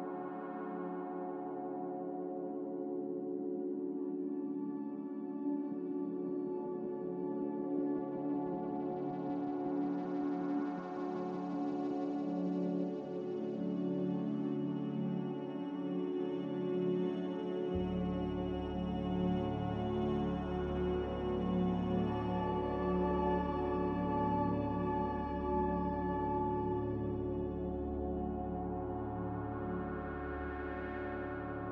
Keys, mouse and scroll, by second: 1.8 click, 4.9 Delete, 12.8 Delete, 14.5 Delete, 15.3 m, 18.9 Escape, 19.0 Escape.